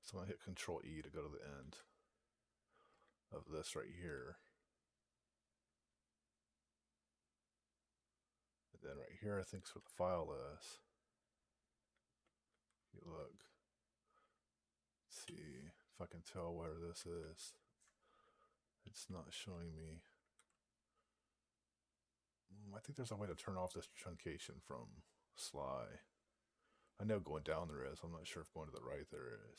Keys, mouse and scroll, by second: 1.4 ctrl+e, 4.0-5.3 Left, 9.7 Down, 12.3 ctrl+e, 13.0-15.1 Left, 17.0 ctrl+e, 19.2 ctrl+a, 20.0 ctrl+e.